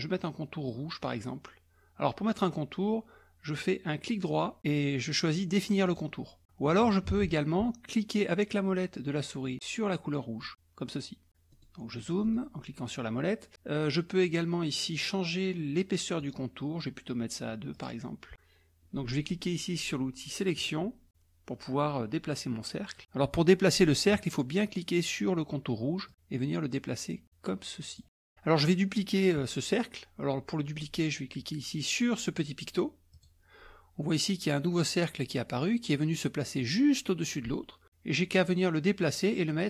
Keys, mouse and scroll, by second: 5.9 click, 7.2 ctrl+z, 10.4 scroll up 2, 11.5-12.7 scroll up 4, 16.6 right click, 17.8 click, 20.6 click, 26.1-28.0 drag, 28.0 middle click, 33.2 click, 38.4-39.6 drag.